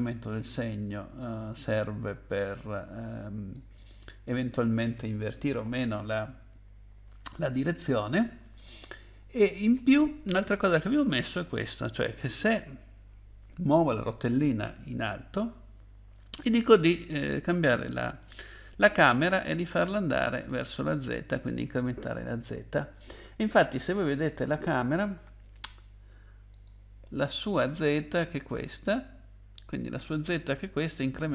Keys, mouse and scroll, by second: 0.5 click, 26.5 click.